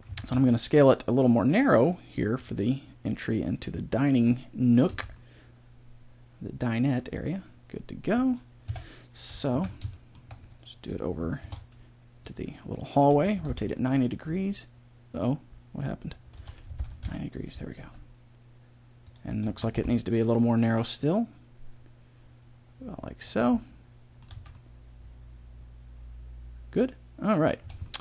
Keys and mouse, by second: 0.1 s, 3.1-4.2 drag, 4.2 middle click, 4.8 z, 5.5 middle click, 5.9-7.1 middle drag, 8.6 KP_7, 9.5 z, 9.6 middle click, 10.0 middle click, 11.4 shift+d, 13.1 r, 16.4 r, 17.8 g, 19.5 s, 23.5 middle click, 24.3 z, 27.7-28.0 middle drag.